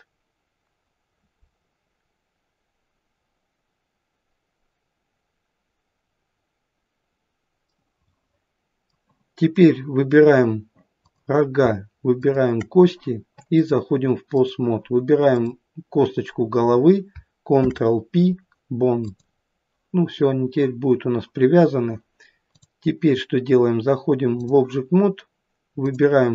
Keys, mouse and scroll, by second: 7.7 middle click, 8.9 middle click, 11.0 click, 12.2 shift+click, 13.6 click, 17.6 ctrl+p, 22.6 click, 25.9 click.